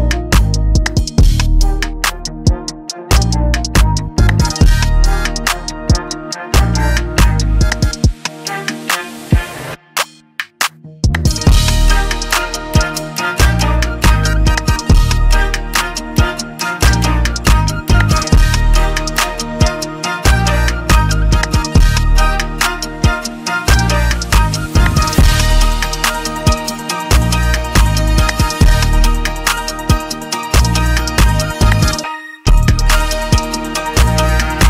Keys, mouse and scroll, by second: 1.4 click, 1.4-3.2 scroll, 3.5 click, 4.2 scroll down 3, 5.7 click, 6.9 click, 8.5 click, 9.3 scroll, 10.6 click, 13.1 click, 13.1 scroll, 14.4 middle click, 18.6 click, 19.0 middle click, 19.6 scroll, 20.2-20.6 scroll, 21.5 click, 23.2 click, 25.9 scroll, 25.9 click, 26.8 middle click, 28.3 click, 30.3 click, 32.0 middle click, 34.0 click, 34.0 middle click, 34.4 scroll.